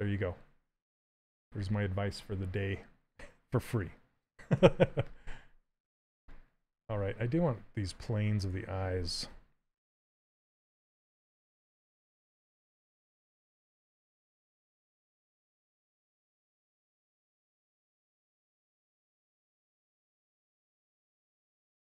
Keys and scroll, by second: 4.3 w, 5.7 q, 10.4 s, 15.5 ctrl+z.